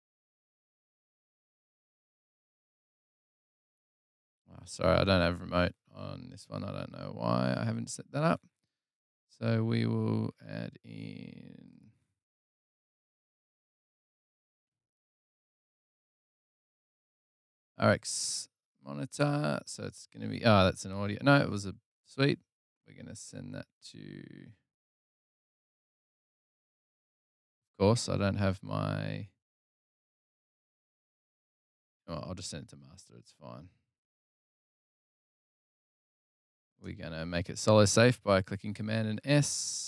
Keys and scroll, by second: 5.7 super+Tab, 6.4 super+Tab, 14.3 super+Right, 14.7 super+Down, 16.1 Tab, 16.7-19.0 typing, 19.0 Return.